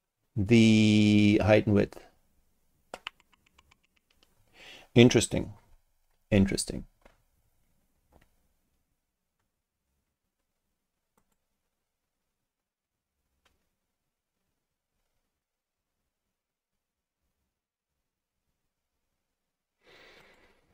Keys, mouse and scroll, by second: 11.2 click, 20.2 click.